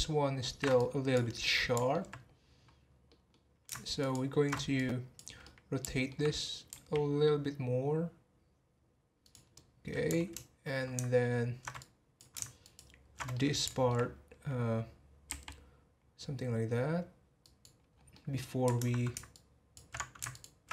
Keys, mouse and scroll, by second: 0.7 click, 1.4 middle click, 2.2 scroll up 2, 3.1 middle drag, 3.4-4.0 scroll down 1, 4.0 ctrl+alt+shift+click, 4.7 click, 5.4-6.7 middle drag, 6.7 r, 9.5-11.8 middle drag, 11.8 click, 13.3-15.3 middle drag, 15.3 r, 17.9 scroll down 2, 18.1-19.3 middle drag, 19.3 ctrl+alt+shift+click, 20.3 ctrl+alt+shift+click.